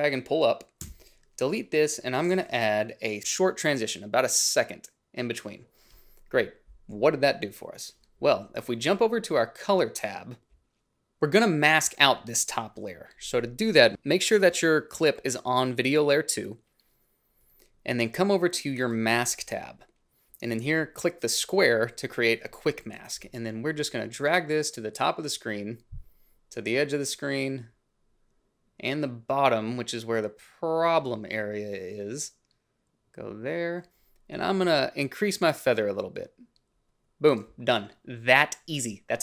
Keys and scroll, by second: 0.8 Delete.